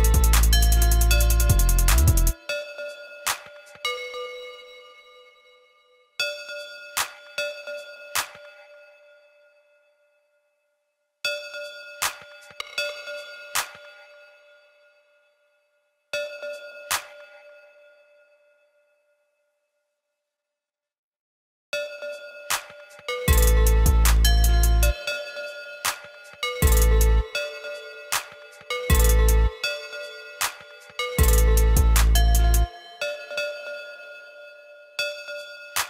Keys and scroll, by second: 14.3 ctrl+z, 15.1 ctrl+z, 17.5 ctrl+x, 18.8 ctrl+c, 19.1 ctrl+b, 19.7 ctrl+b.